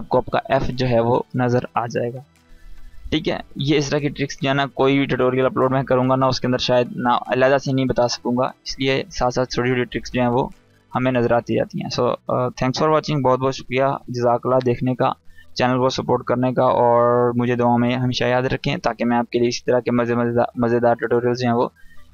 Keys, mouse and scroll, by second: 0.0 space, 0.1-0.7 click, 0.5 space, 0.7-1.1 scroll up 1, 5.9-6.9 click, 7.1-8.6 scroll down 1, 8.6-9.5 drag.